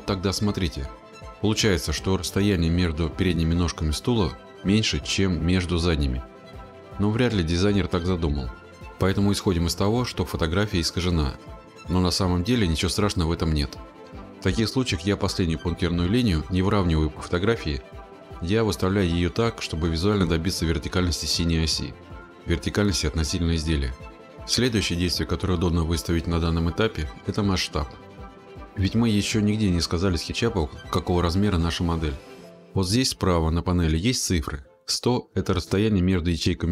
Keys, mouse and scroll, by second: 28.7-32.7 drag.